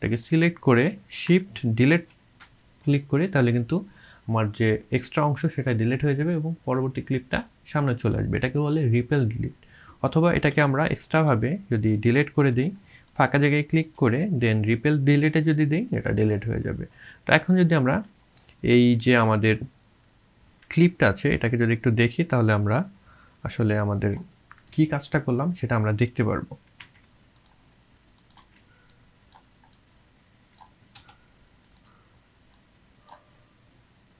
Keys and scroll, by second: 1.7 shift+Delete, 10.3 ctrl+z, 12.5 Delete, 14.0 space, 26.8 c, 28.4 v, 31.0 Delete.